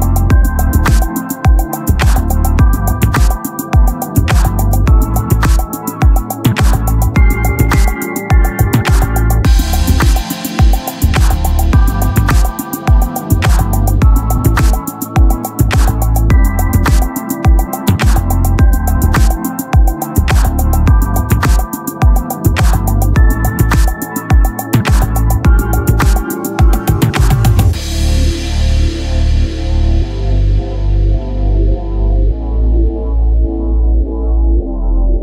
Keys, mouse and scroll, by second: 2.1-4.4 middle drag, 4.9-6.0 right drag, 6.0 middle click, 7.0 Tab, 8.3 ctrl+Tab, 9.0-11.8 drag, 10.3 s, 11.9 s, 13.4 Tab, 17.4 middle click, 17.6 Tab, 18.3 click, 19.2 click, 19.8 right click, 19.8 s, 21.2 Tab, 23.0 right click, 23.3-24.4 drag, 25.1 Tab, 26.4 click, 28.3 click, 28.3 s, 28.9-31.8 right drag, 30.1 s, 31.9 Tab, 34.3-35.2 drag.